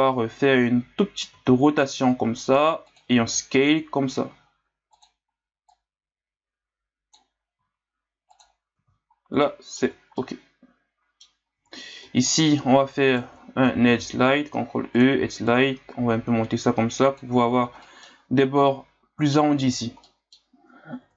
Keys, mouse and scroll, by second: 1.3 r, 3.3 s, 5.7-7.5 drag, 7.5 s, 8.8 z, 9.2 scroll down 1, 9.4 middle click, 9.8 Tab, 10.1-11.3 middle drag, 11.3 scroll up 1, 11.6 Tab, 12.3 alt+right click, 13.1 alt+right click, 13.9 ctrl+e, 17.8-21.0 middle drag, 21.0 Tab.